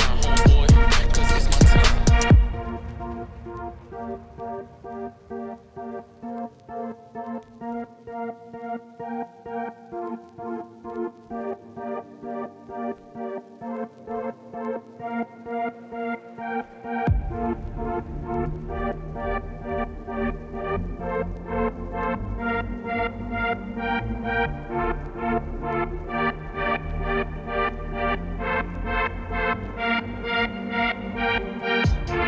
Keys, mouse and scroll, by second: 0.5-0.8 scroll up 1, 0.8 1, 1.0 click, 1.2 shift+click, 1.6 j, 2.1 click, 2.3 x, 3.0 ctrl+z, 3.8 middle click, 4.6 x, 5.4 middle click, 5.7 2, 5.8 click, 5.9 f, 6.2 f, 7.0 middle click, 7.2 f, 7.3 f, 8.3 ctrl+z, 8.5 middle click, 8.8 1, 9.3 click, 9.6 shift+click, 10.0 click, 10.4 middle click, 10.8 scroll up 2, 11.0 shift+middle click, 11.3 shift+click, 11.6 shift+click, 11.8 shift+click, 12.2 f, 12.5 click, 12.6 f, 12.8 f, 13.2 click, 13.4 middle click, 13.7 1, 14.0 shift+click, 14.1 shift+click, 14.7 f, 15.3 click, 15.7 f, 16.2 click, 16.4 middle click, 17.0 click, 17.2 click, 17.6 click, 17.8 shift+click, 18.4 shift+click, 18.6 f, 19.7 click, 19.9 2, 20.0 click, 20.1 f, 20.6 click, 21.0 f, 21.7 click, 21.9 click, 22.5 3, 22.5 click, 23.5 ctrl+z, 23.7 x, 24.6 click, 24.8 f, 26.4 middle click, 27.2 click, 27.8 middle click, 28.3 click, 28.5 3, 28.5 click, 28.7 x, 29.4 click, 29.7 f, 29.9 f, 30.4 scroll down 1, 30.5 Tab, 30.7 middle click, 31.4 scroll up 2, 31.5 shift+middle click, 32.2 Tab.